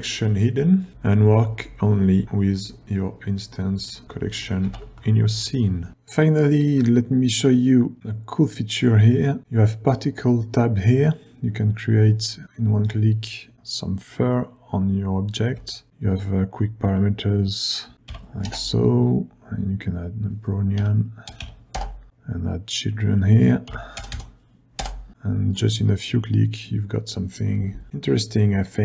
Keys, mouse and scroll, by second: 0.7 click, 2.2 g, 3.8-4.7 typing, 3.9 click, 8.0-9.9 scroll down 1, 13.5-14.4 scroll up 2, 15.8 ctrl+scroll down 2, 24.1 KP_0, 26.1-26.7 scroll up 2.